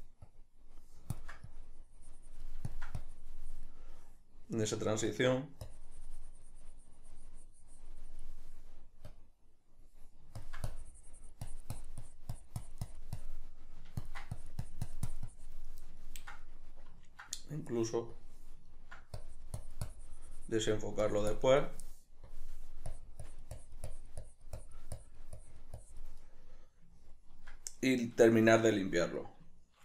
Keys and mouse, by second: 16.4-18.5 ctrl+middle drag, 18.5 click, 19.0 ctrl+middle click, 19.6-26.8 drag, 26.8-29.1 middle drag, 29.2-29.8 ctrl+middle drag.